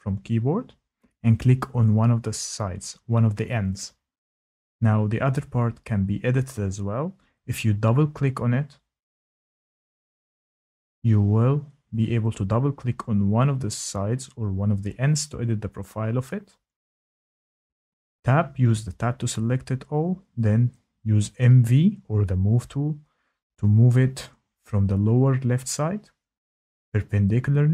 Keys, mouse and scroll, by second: 2.6 click, 6.2 Escape, 8.3 click, 8.7 click, 10.7 click, 11.2 click, 12.5 click, 14.9 click, 15.1 click, 17.8 Tab, 19.5 click, 21.9 click, 25.0 click.